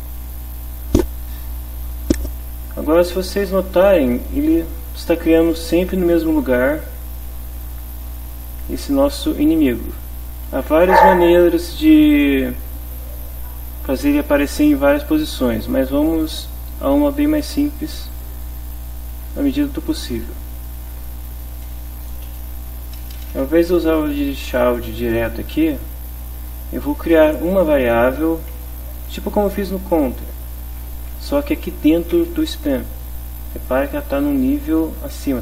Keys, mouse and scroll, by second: 2.7 Left, 6.2-7.2 drag, 7.5 click, 9.5 click, 18.1 click, 20.3 Down, 20.8 Right, 21.7 shift+Home, 22.7 shift+End, 23.2 shift+BackSpace, 27.3 Home, 30.8-32.5 typing, 34.2 click, 35.2 click.